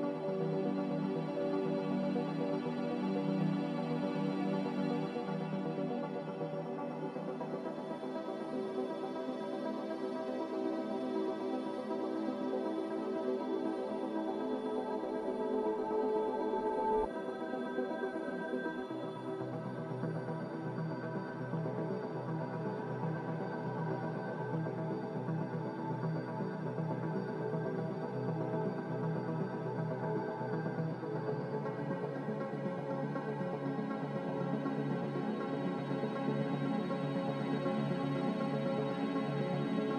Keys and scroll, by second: 1.9 z, 4.7 5, 5.8 BackSpace, 6.0 7, 6.2 Return, 9.4 g, 9.9 z, 15.5 a, 24.5 b, 36.6 ctrl+z.